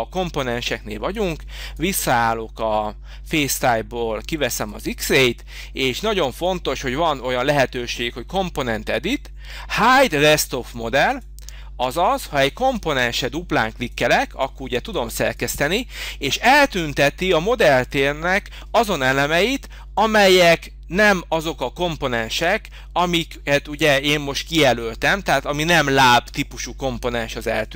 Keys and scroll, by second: 13.0 space.